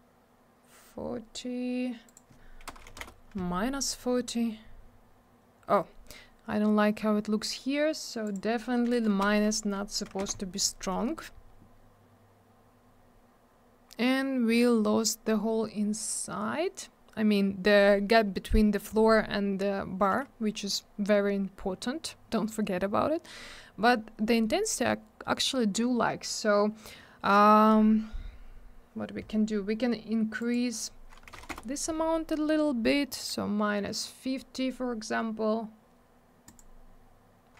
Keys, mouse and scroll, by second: 2.0 click, 2.1 click, 2.7 BackSpace, 2.9 4, 3.0 Return, 8.2 click, 8.3 click, 9.2 BackSpace, 10.0 1, 30.4 click, 30.5 click, 31.3 BackSpace, 31.3 5, 36.4 click, 36.5 click.